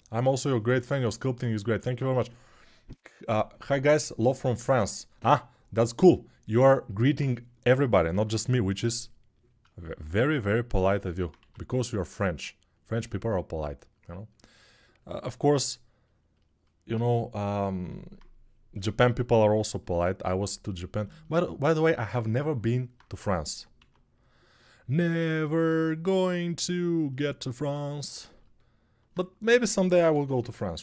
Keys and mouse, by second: 7.9 x, 11.2 1, 23.5 x, 26.5-30.1 shift+right drag, 29.2-30.1 typing.